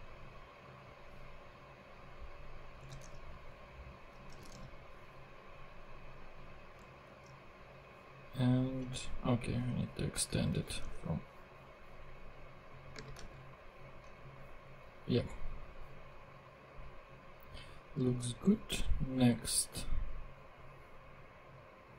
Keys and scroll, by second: 2.9 super+c, 3.1 super+Tab, 4.3 Return, 4.7 super+v, 7.0 super+Tab, 10.6 super+c, 10.8 super+Tab, 12.9 space, 13.2 super+v, 18.2 super+Tab.